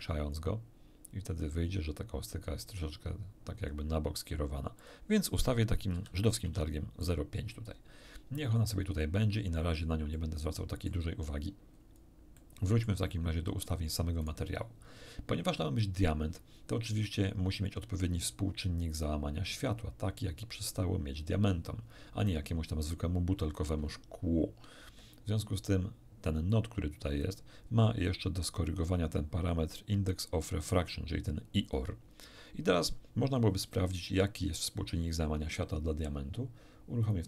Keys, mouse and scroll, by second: 3.3-4.0 scroll down 2, 4.8 click, 5.9 ., 6.5 5, 7.0 click, 9.6 scroll up 2, 10.1 middle click, 10.3 scroll up 2, 11.8 scroll up 2, 12.3 middle click, 13.1 middle click, 14.2 right click, 24.8 shift+F3, 26.5-27.4 drag, 37.0 click.